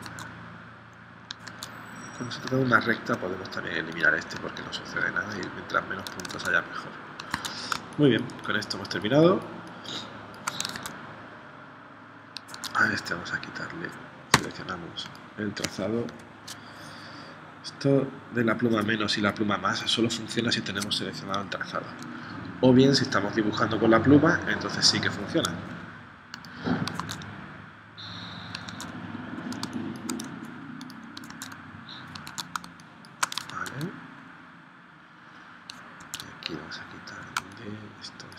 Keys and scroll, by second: 0.1 super+Tab, 1.5 super+Tab, 6.3 super+Tab, 7.4 super+Tab, 7.7 space, 10.8 super+Tab, 12.5 super+Tab, 14.3 v, 16.1 p, 27.0 super+Tab, 28.7 super+Tab, 29.6 space, 31.3 super+Tab, 32.3 super+Tab, 32.6 space, 33.6 super+Tab, 36.0 super+Tab, 37.4 space.